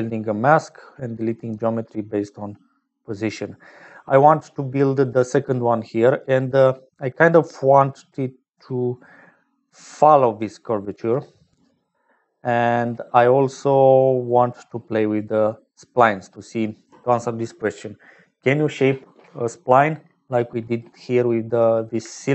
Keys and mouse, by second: 0.0 click, 4.3 middle click, 8.5-9.2 d, 9.3-12.5 drag, 9.3-11.5 d, 12.3 d, 12.5 d, 14.3 click, 15.2 click, 16.7 click, 22.2 shift+click.